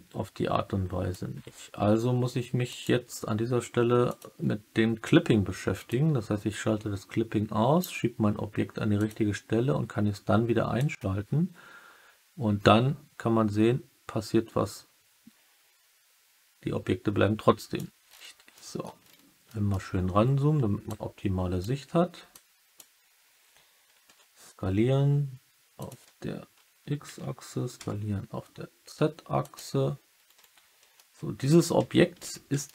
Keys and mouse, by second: 2.6 click, 4.0 click, 5.8-7.7 drag, 8.9 click, 10.7-17.7 drag, 18.5 middle click, 19.4 middle click, 20.9 click, 22.2 click, 24.0 s, 25.7 click, 27.7 z, 29.3 click, 30.9 alt+middle click, 31.7 Tab, 32.6-32.7 alt+middle drag.